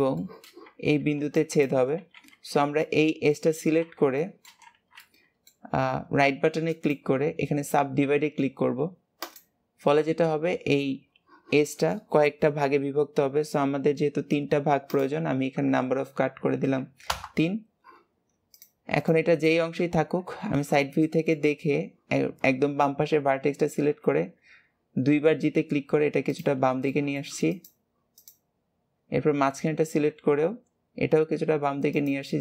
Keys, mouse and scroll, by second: 0.1-2.4 shift+middle drag, 2.4-2.8 scroll down 2, 2.8 middle click, 3.5 alt+z, 4.1 shift+middle click, 4.6 alt+z, 5.0 middle click, 5.8-6.6 scroll up 1, 6.6-14.8 right drag, 14.8-17.9 drag, 18.4 click, 19.0 click, 19.8 KP_3, 21.0 shift+middle click, 21.5 scroll up 2, 26.8 shift+middle click, 27.4 click, 28.1 click.